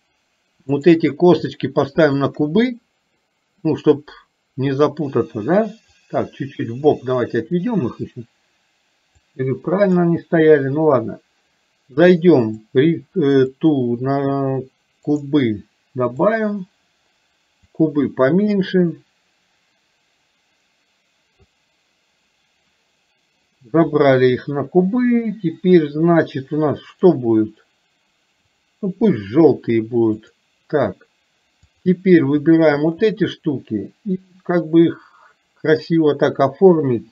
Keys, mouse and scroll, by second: 0.9 click, 6.1-7.7 drag, 9.2 click, 12.5 click, 13.6-16.4 drag, 17.6-30.5 drag.